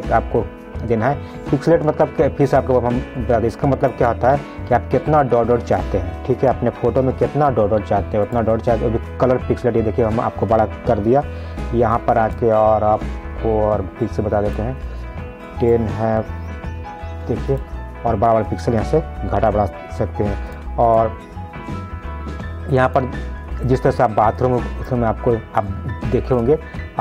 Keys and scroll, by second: 11.4 ctrl+z, 19.6 ctrl+z.